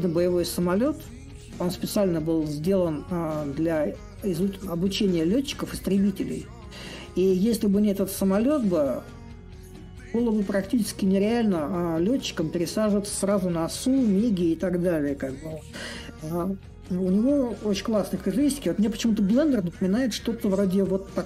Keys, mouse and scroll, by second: 5.4-10.5 drag, 11.3-16.4 drag, 17.9-21.2 drag.